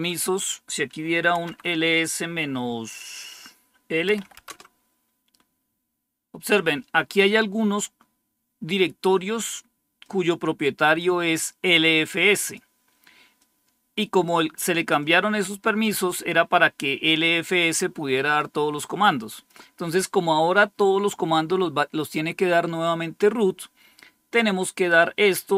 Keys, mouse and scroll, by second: 1.3 typing, 4.2 typing, 9.9-11.5 drag, 11.6-14.1 drag, 14.9 click, 17.3 click, 18.7 click, 19.6 click.